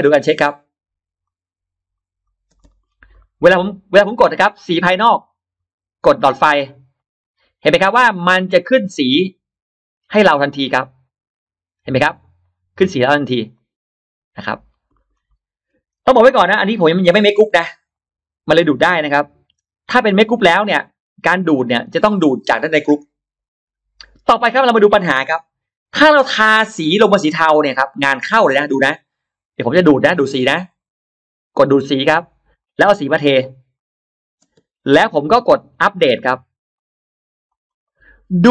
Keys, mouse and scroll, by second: 0.0 ctrl+alt+middle click, 1.1 click, 2.1 click, 2.3 space, 2.4 click, 2.7-3.0 scroll down 1, 3.0 middle click, 4.9 click, 6.8 click, 8.9 click, 12.3 click, 13.4 click, 14.5-15.2 scroll down 1, 14.8-15.2 middle drag, 15.2 scroll up 1, 15.5 middle drag, 15.9 click, 17.1 click, 17.8 click, 18.5 click, 19.0 click, 20.1-20.4 scroll down 1, 20.6 middle click, 24.2-24.5 scroll up 1, 25.4-25.7 scroll up 1, 27.3 click, 28.5 click, 30.2 click, 31.5 click, 32.5 click, 33.6 click, 34.3 space, 34.9-35.7 drag, 36.6 click, 37.3 click, 37.9 click, 38.1-38.4 scroll down 1.